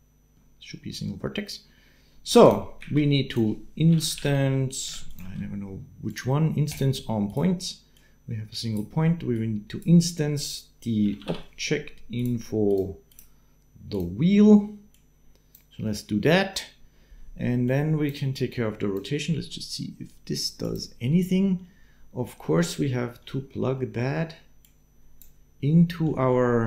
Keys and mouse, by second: 2.7 shift+a, 5.1 shift+a, 7.7 click, 9.1-12.5 drag, 13.2 click, 20.4 middle click, 21.6 middle click, 23.7 middle click, 26.1 middle click.